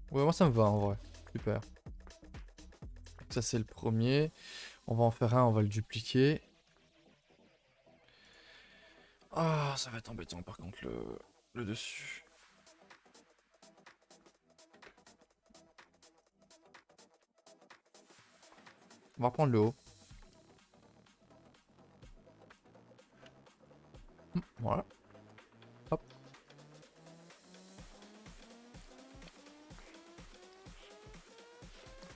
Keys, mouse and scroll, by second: 0.6 scroll down 2, 0.8 a, 1.0 a, 1.5-2.9 middle drag, 2.9 KP_0, 3.6 scroll up 5, 3.9 a, 4.0 a, 4.3 click, 6.3 h, 6.6-7.3 scroll up 1, 7.3 click, 8.3 z, 8.7-9.7 shift+middle drag, 9.7 a, 9.9 a, 16.4 click, 17.1 click, 17.7 Tab, 18.0 a, 18.1 a, 18.4 3, 18.9 alt+Left, 20.9 alt+shift+Left, 21.7 z, 22.6 c, 23.6 z, 24.1 shift+d, 25.5 p, 25.8 Tab, 26.1 click, 28.0 click, 28.1 h, 28.6 click, 28.8 Tab, 29.4 a, 29.5 a, 31.2 Tab.